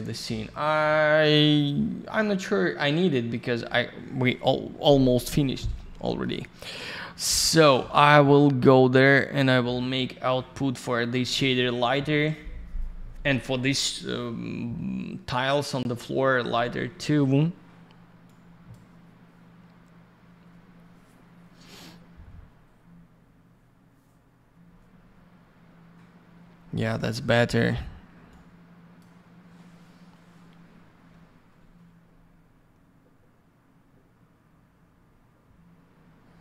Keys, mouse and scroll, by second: 2.3 scroll up 1, 2.9 scroll down 1, 5.9 middle click, 6.6-7.4 scroll up 1, 7.4 click, 7.5 click, 7.6 click, 7.7 double click, 9.0 click, 18.2 click, 28.3 click.